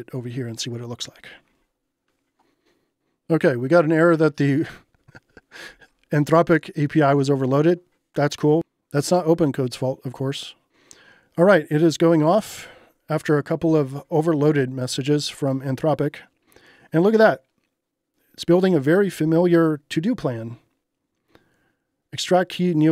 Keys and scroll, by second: 7.1 Return.